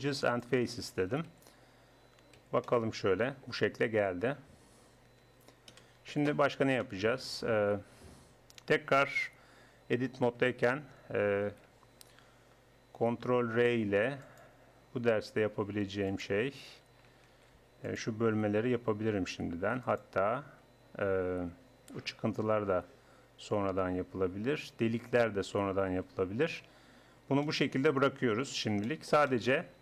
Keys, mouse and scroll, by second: 1.3 z, 2.4 z, 3.8 Tab, 4.6 Tab, 5.3 Tab, 5.7 KP_1, 9.4 Tab, 11.5 ctrl+r, 17.3 ctrl+r, 26.1 middle click, 27.0 Tab.